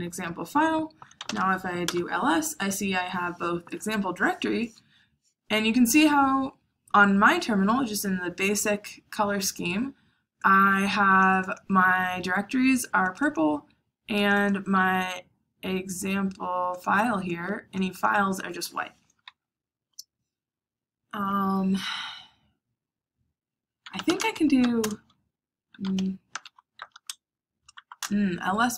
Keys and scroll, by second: 0.9-1.7 typing, 1.8 Return, 23.7-27.7 typing, 27.9 Return.